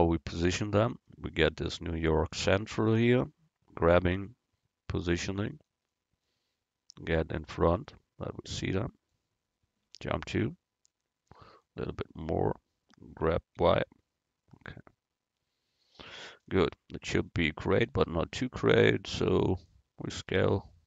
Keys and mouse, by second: 4.0 g, 7.2-9.0 drag, 10.0 KP_Decimal, 10.8 click, 13.4 g, 20.3 s.